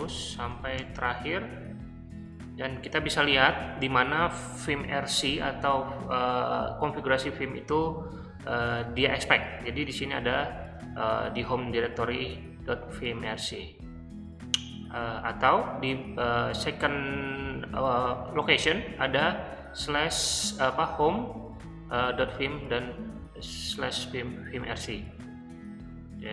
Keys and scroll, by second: 0.1 Return, 0.2-1.2 Return, 1.1 typing.